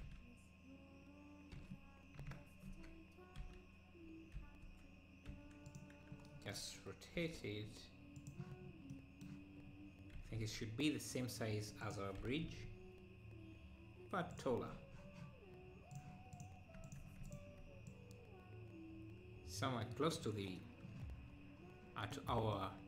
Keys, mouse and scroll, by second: 7.2 g, 8.7 scroll down 4, 9.0 middle click, 9.7-10.2 scroll up 1, 10.2 s, 12.2 g, 14.5 Tab, 16.0-17.6 drag, 17.9-20.9 drag, 21.4-21.9 scroll up 2, 22.1-22.8 middle drag.